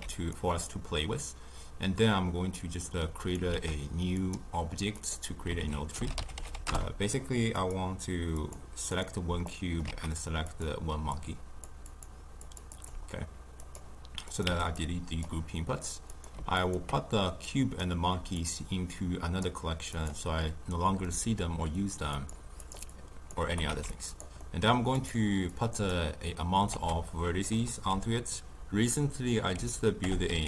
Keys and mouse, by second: 3.3 click, 4.3 shift+a, 5.0-8.5 drag, 9.8 shift+d, 13.0 click, 14.4 x, 15.3 click, 16.1 click, 16.6 ctrl+click, 18.4 click, 20.0 click.